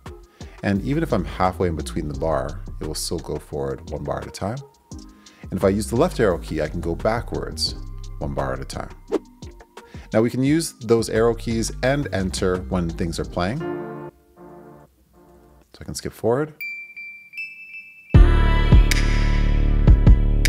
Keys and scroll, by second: 2.4 Right, 2.8 Left, 3.2 Right, 13.5 space, 14.0 Right.